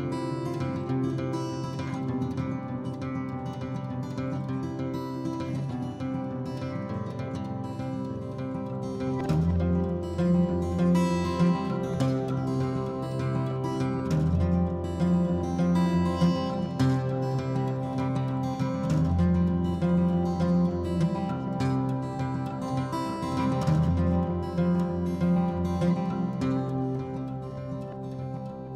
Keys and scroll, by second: 1.5-2.2 typing, 3.2 m, 4.5-5.7 typing, 6.3 ctrl+z, 6.6 Escape, 7.7-12.3 typing, 15.4 p, 15.9 m, 16.4 1, 16.6 Return, 17.2 p, 18.8 Delete, 21.3 m, 22.7 p, 26.3-28.3 typing.